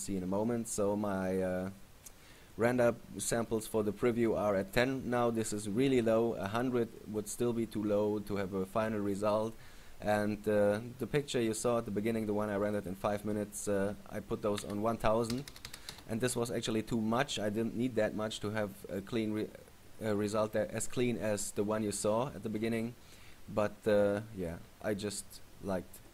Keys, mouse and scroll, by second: 12.8 click.